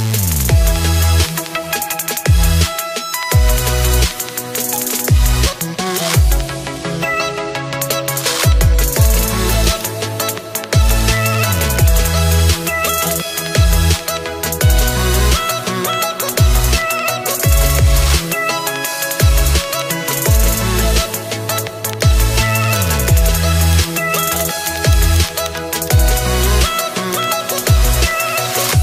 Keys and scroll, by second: 11.6 0.